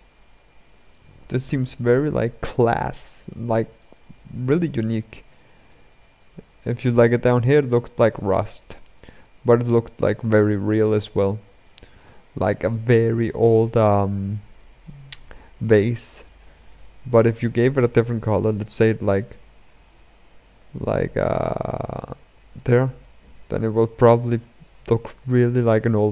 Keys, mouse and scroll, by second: 1.3-3.1 scroll up 9, 3.1-5.6 shift+middle drag, 5.6-7.4 drag, 7.4-8.8 scroll down 11, 8.8-9.2 shift+middle drag, 9.2-10.1 scroll up 6, 10.1-10.7 shift+middle drag, 10.7-11.4 scroll up 2, 11.4-13.6 middle drag, 13.6-14.3 scroll down 6, 14.3-19.1 shift+middle drag, 19.1 click, 22.7-26.1 middle drag.